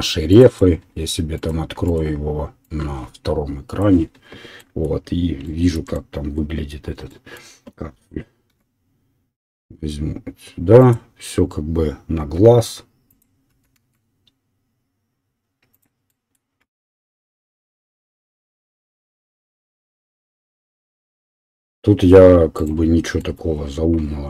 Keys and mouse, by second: 1.2-8.0 middle drag, 8.0-11.1 drag, 8.6 e, 12.3 s, 13.6 e, 14.3-24.2 middle drag, 16.9 e, 17.6 e, 21.3 e.